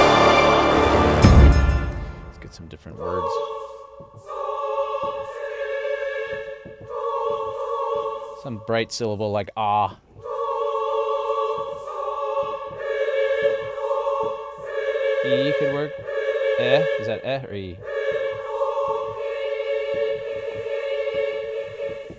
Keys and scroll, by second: 1.4 space.